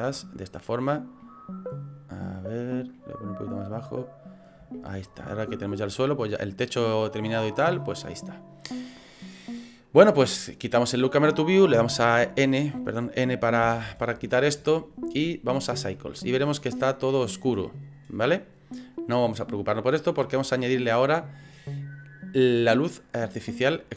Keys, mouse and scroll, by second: 1.2 middle click, 2.5 middle click, 3.1 middle click, 4.8 shift+middle click, 8.8 click, 10.8 click, 11.8 m, 13.7 n, 15.7 click.